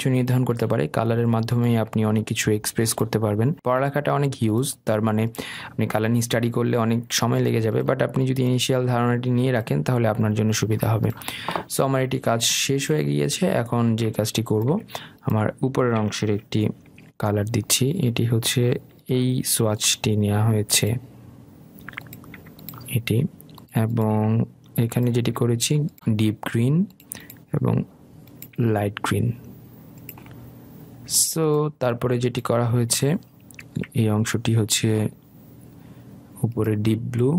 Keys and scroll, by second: 18.9 i.